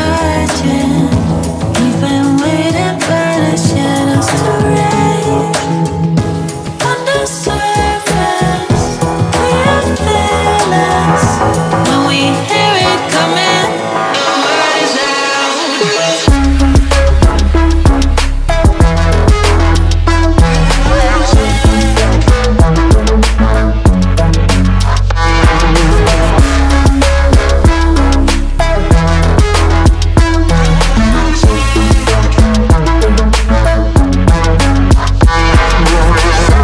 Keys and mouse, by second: 1.3 Tab, 2.7 Tab, 3.8 KP_1, 11.3 ctrl+r, 15.9 Tab, 16.2 g, 16.5 z, 21.7 KP_Decimal, 21.8 KP_2, 21.8 BackSpace, 23.1 KP_Enter, 27.6 ctrl+z, 28.1 Tab, 29.0 a, 30.3 g, 31.5 KP_Decimal, 31.7 KP_3, 32.8 KP_Enter, 33.6 shift+z, 34.6 middle click, 35.3 shift+z, 35.9 middle click, 36.4 middle click.